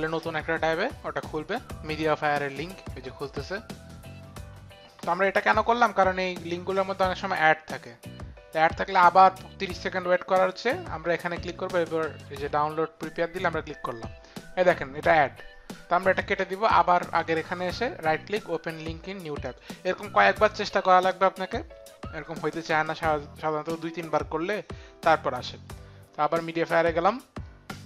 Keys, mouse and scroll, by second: 5.6 click, 7.2 click, 16.0 middle click, 17.5 right click, 18.4 click, 19.4 click.